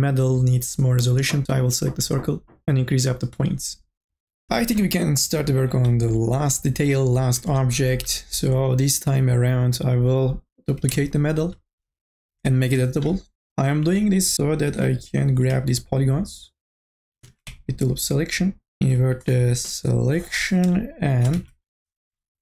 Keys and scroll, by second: 12.7 c, 13.9 3, 14.7 u, 15.1 l, 18.8 u, 19.2 i, 19.7 Delete, 21.4 1, 22.1 KP_0.